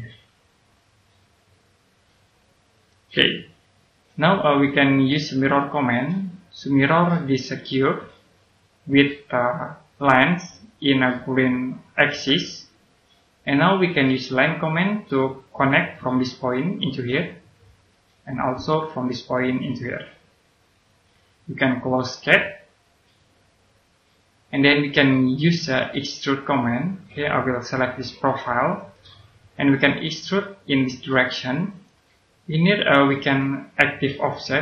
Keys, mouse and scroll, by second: 2.7 click, 3.8-5.3 scroll up 1, 5.3 click, 25.1 middle click, 26.8 click, 32.0 right click.